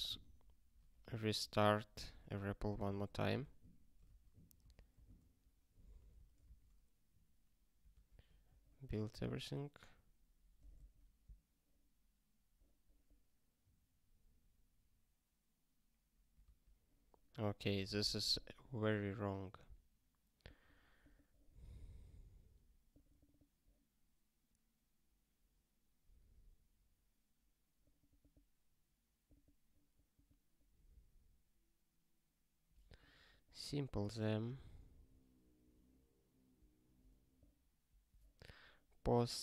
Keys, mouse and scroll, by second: 2.7 super+o, 3.3 alt+x, 4.0 Return, 4.6 Return, 6.0 super+o, 6.9 ctrl+k, 16.4 ctrl+k, 18.7 scroll up 1, 22.7 scroll up 4, 27.9 scroll up 1, 29.2 scroll up 3, 32.9 scroll up 1.